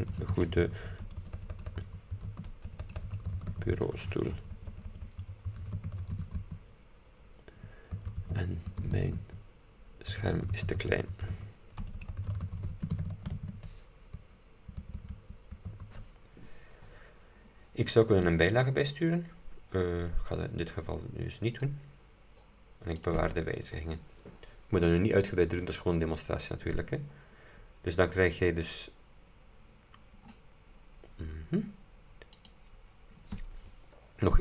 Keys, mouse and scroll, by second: 0.0-14.3 typing, 15.8 space, 17.4 scroll down 2, 18.4 click, 21.6 click, 23.1 click, 27.3-28.3 scroll down 4, 29.9-30.4 scroll down 2, 30.4-31.2 scroll up 2, 32.5 click.